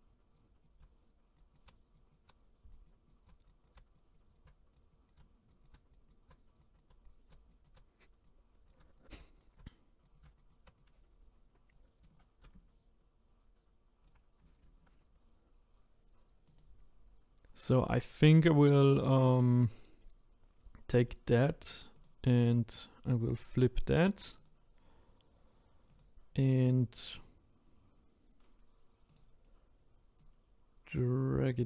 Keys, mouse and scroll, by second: 0.6 click, 0.8-10.6 typing, 1.5 click, 2.1 click, 2.9 click, 3.1 click, 3.6 click, 4.3 click, 5.1 click, 5.6 click, 6.1 click, 6.7 click, 7.6 click, 8.7 click, 9.1 click, 10.1 click, 10.5 click, 11.7 click, 12.4 r, 14.6 ctrl+z, 16.6 click, 24.4-26.0 right drag, 26.0 click, 29.1-30.3 drag.